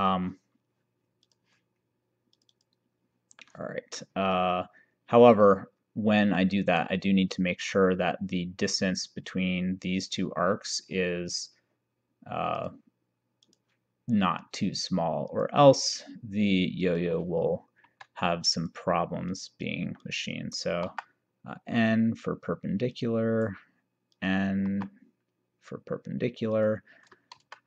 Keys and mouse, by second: 1.3 click, 2.7 click, 3.5 middle click, 6.5 middle click, 12.7 click, 15.4 click, 16.9 click, 17.9 Escape, 18.7 click, 20.9 n, 23.0 click, 24.2 click, 24.7 n, 26.6 click, 27.5 shift+d.